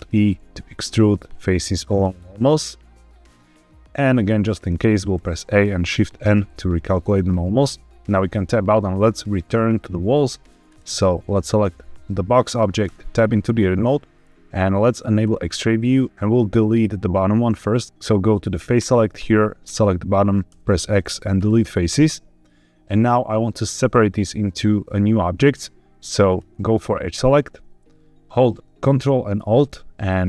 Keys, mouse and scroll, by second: 4.5 click, 5.1 a, 6.1 shift+n, 8.0 Tab, 10.6 click, 12.8 Tab, 15.1 click, 17.8 click, 18.6 click, 19.5 click, 20.4 x, 26.2 click.